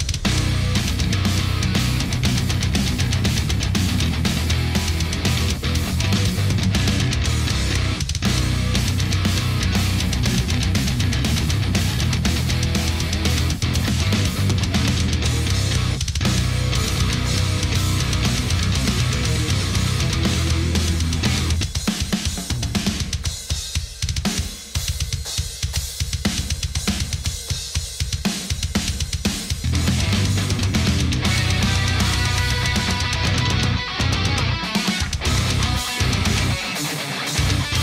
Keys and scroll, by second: 4.5 super+=, 5.3 super+s, 18.4 shift+super+g.